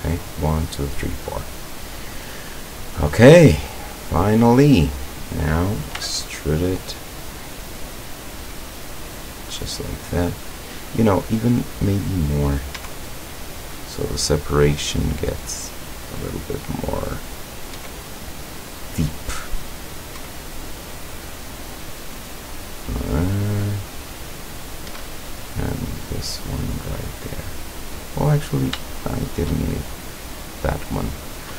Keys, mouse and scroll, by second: 2.7-3.4 scroll up 2, 4.1 right click, 4.6-5.5 middle drag, 6.0 e, 9.2 click, 9.6-9.9 scroll down 2, 11.4-11.8 scroll up 2, 12.8 e, 16.0 click, 17.3 right click, 17.8 e, 18.8 click, 19.9 right click, 20.2 e, 22.6 click, 23.4 right click, 24.1 right click, 24.9 e, 26.7 click, 27.1 scroll down 1, 27.6-28.4 middle drag, 28.9-29.6 shift+middle drag, 30.6-31.0 scroll up 1, 31.2-31.5 scroll down 1.